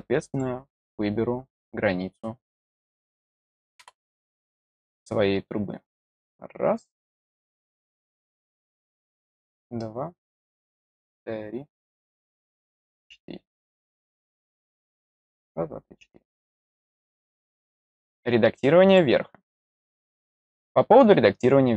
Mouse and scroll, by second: 0.2 click, 2.6 click, 5.9 click, 9.3 click, 10.8 click, 12.5 click, 18.8 click.